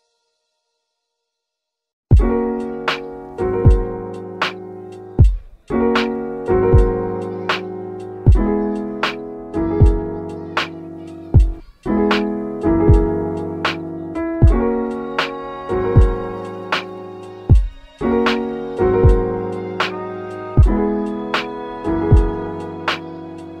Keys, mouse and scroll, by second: 1.4 3, 3.5 1, 4.1 Return, 7.0 g, 7.4 z, 8.6 shift+click, 9.4 click, 11.2 z, 13.9 scroll up 2, 14.2 middle click, 15.0 shift+a, 17.0 click, 17.2 shift+a, 17.3 g, 20.5 click, 21.5-23.6 drag, 23.4 KP_1.